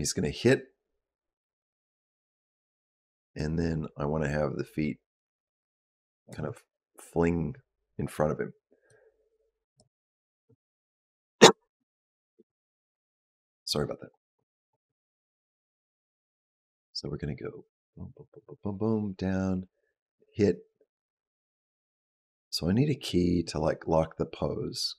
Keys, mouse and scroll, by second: 8.8 click, 15.5 click.